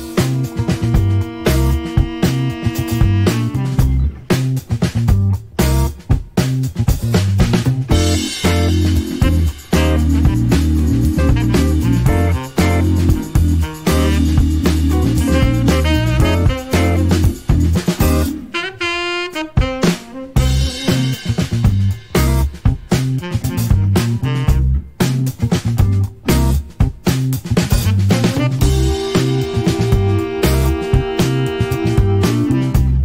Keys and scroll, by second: 1.9 shift+a, 7.2 Escape, 19.5 KP_Decimal, 19.6 KP_1, 19.7 Return.